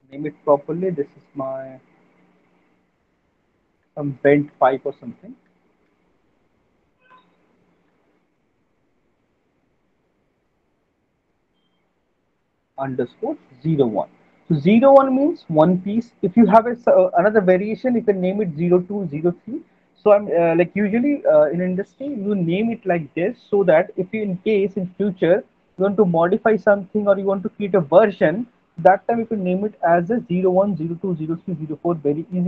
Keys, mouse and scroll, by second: 1.4 click, 3.3 click, 3.9-11.6 typing.